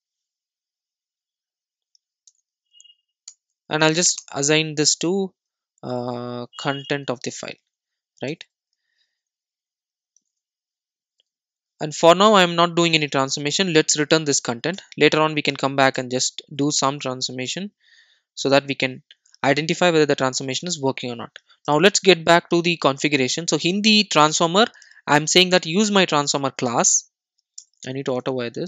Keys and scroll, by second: 3.3 alt+Return, 14.8 Return, 20.9 super+s, 21.4 super+e.